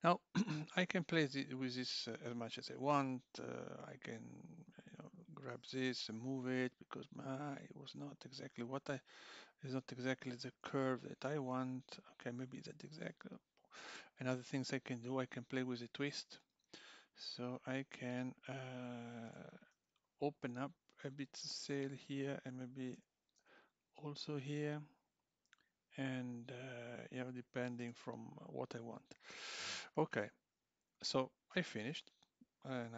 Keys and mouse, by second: 0.1 click, 5.1 click, 6.0 g, 9.8 click, 9.9 g, 16.7 click, 19.3 g, 22.2 click, 23.0 g, 27.8 click, 27.9 g, 29.1 click, 29.4 g.